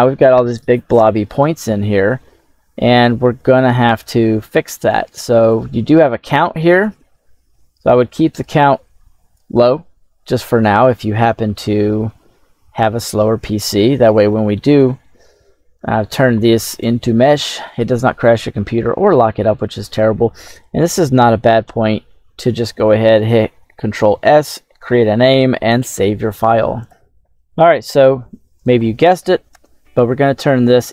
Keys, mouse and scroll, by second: 5.4-9.2 drag, 10.3-11.4 scroll down 2, 10.7 middle click, 13.8-15.7 middle drag, 16.7 click, 26.7 ctrl+x, 26.7 right click, 28.4 right click, 29.4 space.